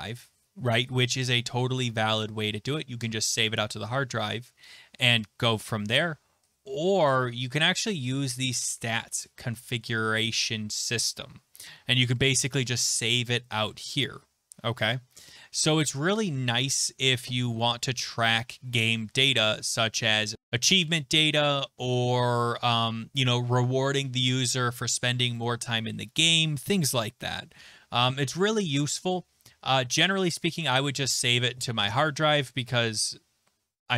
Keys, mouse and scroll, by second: 31.9 click.